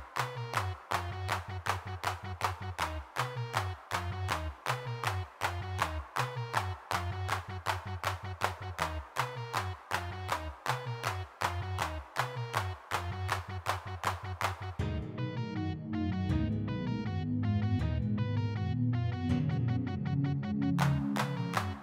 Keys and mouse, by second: 2.0 3, 2.1 f, 2.5 click, 2.9 middle click, 3.8 f, 4.0-5.0 middle drag, 5.2-6.8 middle drag, 7.2 middle click, 9.0 f, 9.9 ctrl+z, 10.3 f, 11.3 ctrl+z, 11.7 g, 12.5 click, 14.1 middle click, 15.0 f, 16.9 middle click, 18.9 3, 19.1 f, 19.7 middle click, 20.0 click, 20.6 f, 20.8 click.